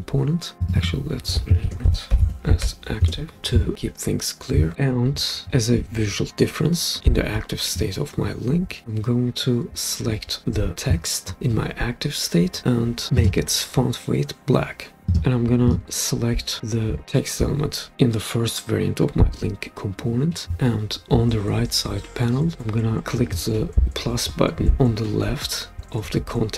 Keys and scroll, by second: 1.4-3.1 typing.